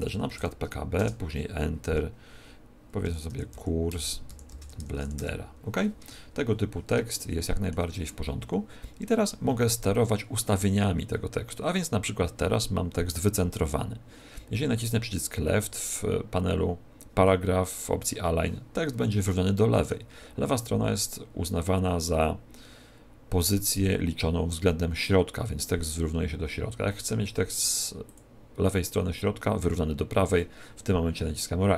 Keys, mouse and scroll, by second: 0.3 shift+b, 0.9 Return, 3.0-5.1 typing, 3.9 Return, 5.9 Tab, 7.1 shift+middle click, 14.8 click, 19.2 shift+middle click, 28.0 click.